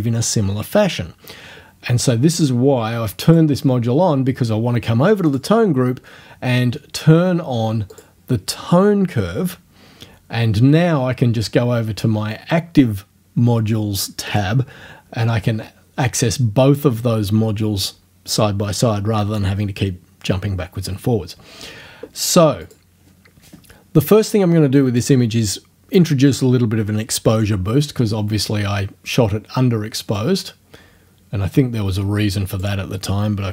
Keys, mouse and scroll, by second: 3.3 click, 5.3 click, 7.9 click, 14.3 click, 22.6 click, 30.2-32.8 drag.